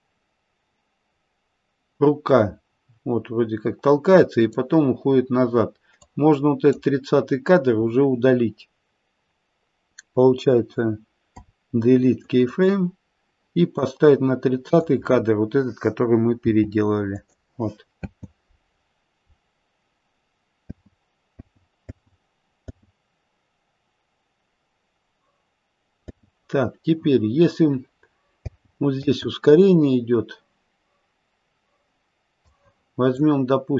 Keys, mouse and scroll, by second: 5.1-6.0 scroll up 2, 6.0 click, 6.0-8.1 scroll up 1, 11.2 Delete, 13.7 click, 16.4 g, 18.0 space, 18.7-20.3 scroll down 5, 20.6 space, 21.3 space, 22.3 space, 22.6 space, 26.0 space, 28.4 space, 32.4 click.